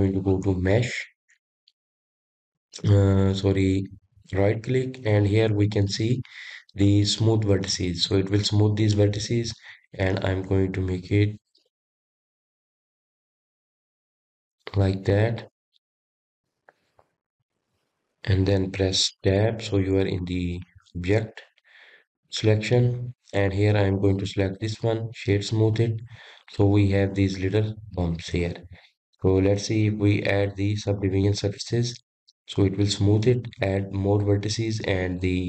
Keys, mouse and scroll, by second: 1.4-4.5 drag, 4.5-9.8 right drag, 9.8-11.1 middle drag, 11.1-14.1 drag, 16.2-19.3 middle drag, 20.9 Tab, 21.6-24.6 middle drag, 24.7 click, 25.3 click, 26.5-27.4 right drag, 27.4-30.4 middle drag, 31.2-33.5 drag, 33.5-35.4 middle drag.